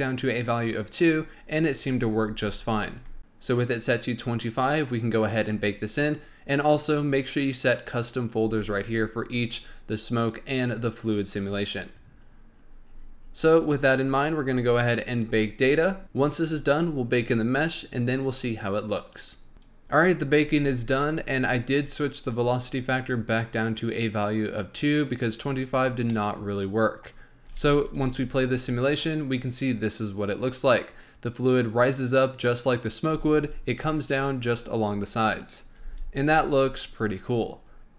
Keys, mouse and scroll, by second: 12.2-14.7 scroll up 13, 14.7-15.1 scroll up 3, 15.1-19.5 drag, 25.8 scroll down 1, 26.0-27.1 middle drag, 27.1-27.4 scroll up 1, 27.4 space, 33.7 space, 35.3 drag, 35.7 space, 36.3-37.8 middle drag, 37.8 click.